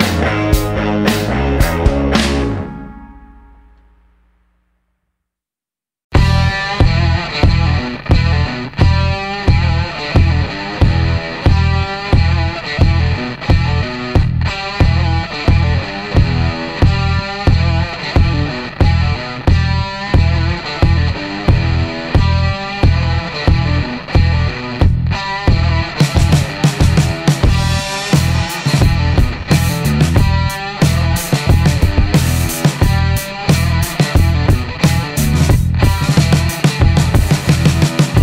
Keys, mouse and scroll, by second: 0.9 click, 2.4 click, 3.7 click, 6.0 click, 7.5 click, 9.5-11.0 middle drag, 11.4-12.4 middle drag, 12.9-13.3 scroll up 1, 14.7 click, 16.5 click, 18.1 shift+o, 19.4 shift+scroll down 1, 19.7 middle click, 20.1 scroll down 1, 20.2-21.2 middle drag, 22.6-23.8 middle drag, 24.5-24.9 scroll up 1, 25.0 middle click, 26.2 click, 28.0 click, 29.5 click, 30.2 middle click, 32.5 click, 33.8 click, 35.0 click, 35.8-36.9 middle drag, 37.8 click.